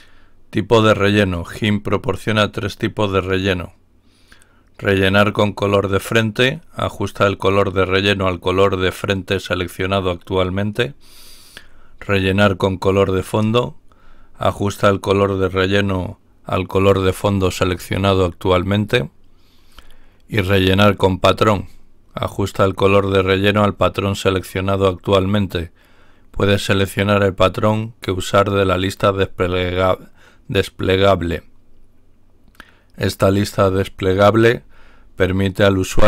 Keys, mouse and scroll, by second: 0.9-1.3 scroll down 2, 8.1-8.8 scroll down 2, 13.2-13.7 scroll down 1, 21.3-21.9 scroll down 2, 34.3-34.9 scroll down 2.